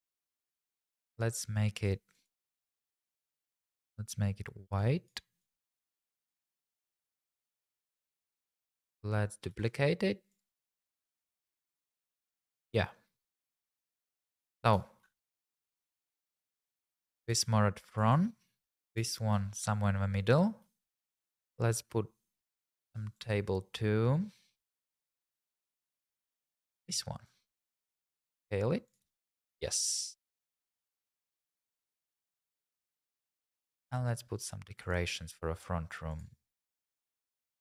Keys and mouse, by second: 2.1 click, 2.6 a, 2.6 KP_Decimal, 4.9 click, 5.4 click, 6.0 click, 8.7 shift+d, 9.5 shift+z, 10.3 click, 11.1 r, 11.4 z, 13.2 g, 13.4 shift+z, 13.9 click, 15.1 middle click, 17.1 g, 17.3 shift+z, 18.8 click, 20.4 click, 20.9 click, 26.5 click, 28.3 s, 28.9 click, 29.0 g, 29.2 shift+z, 29.7 click, 33.9-35.0 drag.